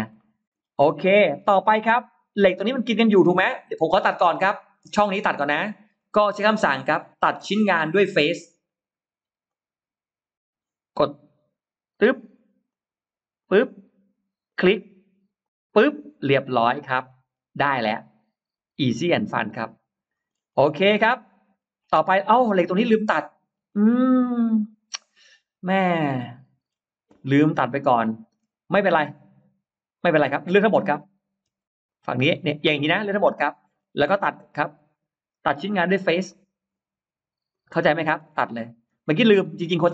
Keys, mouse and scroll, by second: 0.0 middle click, 0.4-0.7 scroll down 2, 0.9 middle click, 1.6-2.5 scroll up 4, 3.3 scroll down 1, 3.8 scroll down 1, 4.4 middle click, 4.9-5.3 scroll up 1, 5.3 middle click, 5.8 middle click, 9.3 click, 11.8 click, 12.6 click, 13.2 click, 14.3 click, 15.3 click, 16.0-17.2 scroll down 3, 16.5 middle click, 17.6-20.1 middle drag, 20.4-21.2 scroll up 3, 21.4 scroll down 1, 22.0-22.7 scroll up 1, 22.5 middle click, 22.9-23.9 scroll down 2, 24.4-26.4 middle drag, 27.6 middle click, 28.9 space, 30.1 click, 30.5 click, 31.4 space, 31.7 click, 33.0 middle click, 33.8-34.9 scroll up 3, 36.1 click, 37.4 click, 38.0-38.7 scroll down 2, 39.0 middle click, 39.5-39.8 scroll down 1.